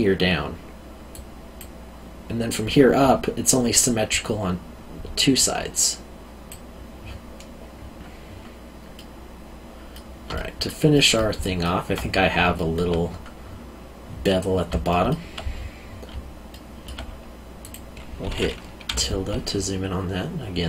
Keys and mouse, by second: 5.1 click, 8.9 middle click, 10.3 alt+middle click, 12.5 alt+middle click, 14.9 alt+middle click, 16.5 alt+middle click, 17.6 click.